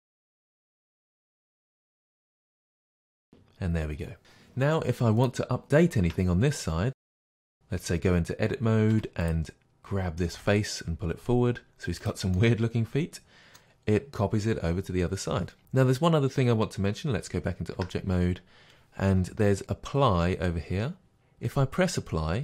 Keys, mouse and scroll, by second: 0.5-5.3 drag, 6.1 Tab, 7.0 middle click, 7.6 Tab, 9.0 3, 9.3 click, 10.3-12.0 middle drag, 10.3 g, 12.0 click, 12.4-22.4 middle drag, 17.8 Tab.